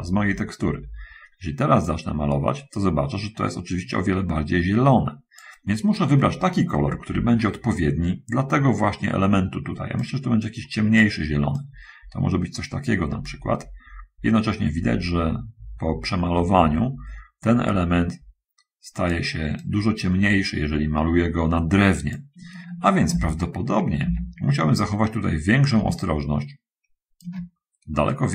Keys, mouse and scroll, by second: 2.2-5.9 drag, 7.3 ctrl+z, 10.3-11.5 drag, 11.9-19.3 drag, 19.8-22.3 drag, 23.4 ctrl+z, 24.0 ctrl+z, 25.3 middle click, 26.3-27.7 shift+drag.